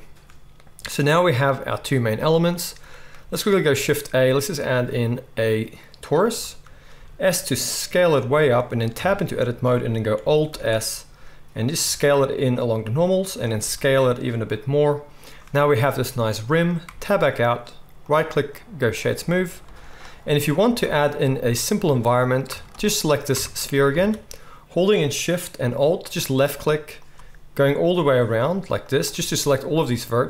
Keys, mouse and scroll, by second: 3.7 shift+a, 6.7 middle click, 6.9 s, 8.3 middle click, 8.9 Tab, 10.4 alt+s, 10.4-18.0 alt+middle drag, 13.6 s, 16.8 Tab, 18.0-26.0 right drag, 19.6 z, 20.8 Tab, 22.4 Tab, 22.6 click, 22.6 middle click, 23.3 Tab, 23.9 alt+a, 26.0 alt+shift+middle click, 26.1-30.2 alt+shift+right drag, 26.9 alt+shift+click, 26.9 alt+shift+middle click, 28.8 alt+shift+click, 28.8 alt+shift+middle click.